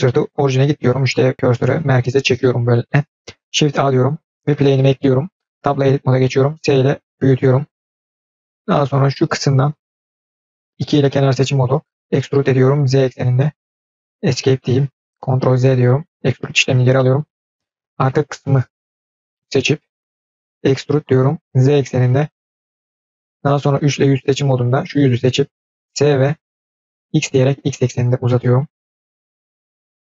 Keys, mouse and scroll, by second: 3.5 shift+a, 5.4 Tab, 6.2 s, 8.3 scroll down 3, 8.3 middle drag, 9.4 click, 10.1 click, 10.8 2, 11.0 click, 11.9 e, 15.3 ctrl+z, 16.8 middle click, 18.5 click, 19.1 middle click, 20.5 e, 24.3 click, 24.7 middle click, 25.8 s, 29.8-30.0 scroll down 2.